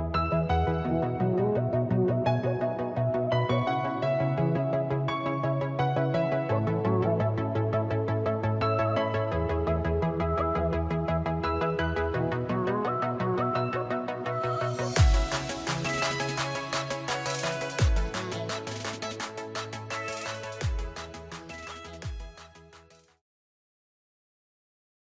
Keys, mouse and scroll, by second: 1.3 middle click, 2.2 shift+middle click, 5.1 middle click, 6.4 ctrl+middle click, 6.4 ctrl+click, 8.1 ctrl+middle click, 13.1 click, 14.1 click.